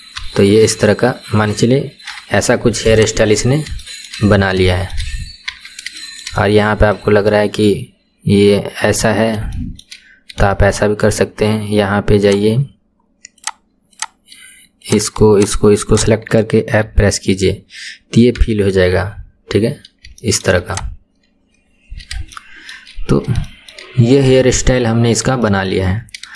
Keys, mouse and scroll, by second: 0.2 KP_1, 1.3-2.2 scroll down 5, 2.2 Tab, 2.9 click, 3.2-3.8 scroll down 5, 3.8-4.3 shift+middle drag, 4.3-4.7 scroll up 4, 4.7-5.1 shift+middle drag, 5.1-5.5 scroll up 2, 5.5 Tab, 6.0-7.2 shift+middle drag, 7.2-9.2 scroll up 4, 9.2-9.6 scroll up 3, 9.6 shift+middle click, 10.1-10.5 scroll up 3, 10.5-12.3 shift+middle drag, 12.3-13.5 drag, 13.9 click, 14.9 click, 15.4 shift+click, 15.9 shift+click, 16.9 f, 17.6-18.2 scroll down 2, 18.4 Tab, 19.0 KP_1, 19.2-19.8 scroll down 4, 19.8-20.3 scroll down 7, 20.3 shift+middle click, 20.7 click, 21.7-22.1 scroll down 2, 22.4 shift+middle click, 23.0-23.5 scroll up 3, 23.5 shift+middle click, 24.0-24.3 scroll up 2, 24.4 shift+middle click, 25.0-25.5 scroll up 1, 25.5-25.9 shift+middle drag, 25.9-26.3 scroll down 5.